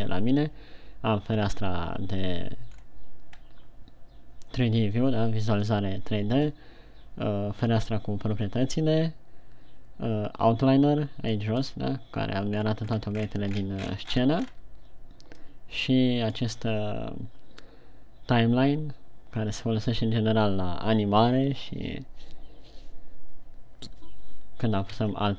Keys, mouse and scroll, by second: 2.5 Escape, 3.3 scroll down 3, 4.0-4.3 scroll up 1, 12.0 click, 12.9-14.2 scroll down 13, 14.2-15.4 scroll up 14, 15.9 click.